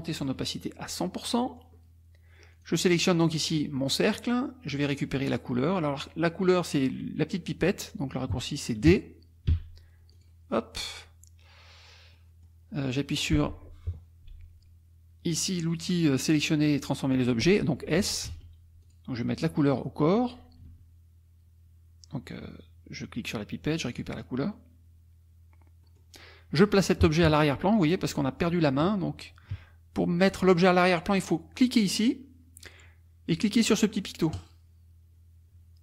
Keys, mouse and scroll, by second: 1.3 click, 2.5 click, 9.5 d, 10.1 click, 12.1 middle click, 18.3 s, 18.8 click, 20.7 d, 23.9 click, 25.9 click, 30.3 click, 34.4 click.